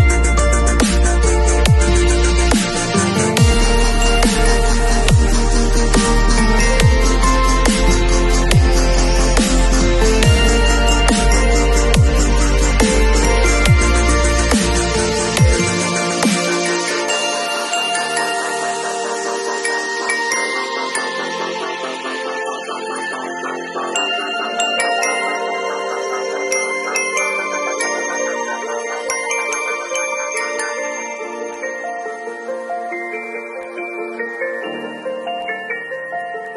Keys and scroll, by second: 6.3 [, 9.2 v, 12.3 super+Tab, 20.5 super+t, 21.2 alt+super+t, 30.2 space, 31.1 super+space, 31.1 super+l.